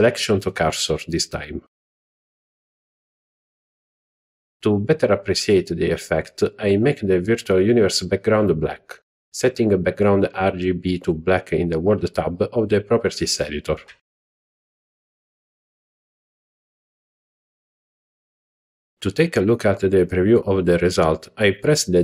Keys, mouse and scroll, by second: 3.7-4.1 scroll down 2, 4.3-4.8 shift+middle drag, 5.0 middle click, 6.5 scroll down 1, 11.0 click, 12.1 z, 14.3-14.6 middle drag, 14.9-15.3 shift+middle drag, 21.4 z.